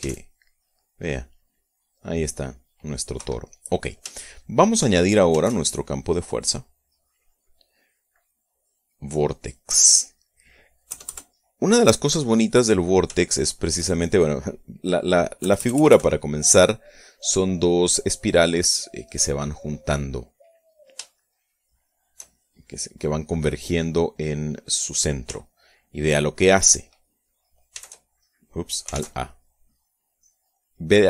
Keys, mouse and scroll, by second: 0.5 alt+a, 3.7 Escape, 4.7-5.8 shift+drag, 5.8 shift+a, 9.6 click, 11.4 KP_Add, 13.7 shift+middle click, 13.9 shift+right click, 14.7 right click, 15.1 middle click, 15.9 KP_Add, 20.7 right click, 21.6 shift+click, 22.3 shift+right click, 22.4-23.7 shift+drag, 23.9 click, 24.6 middle click, 24.7 click, 28.2 shift+a, 29.4 alt+a.